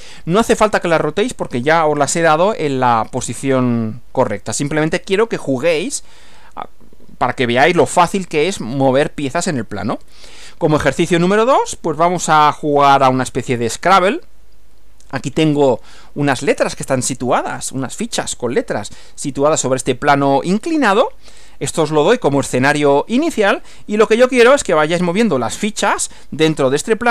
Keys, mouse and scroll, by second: 10.0 Right, 24.8 Right.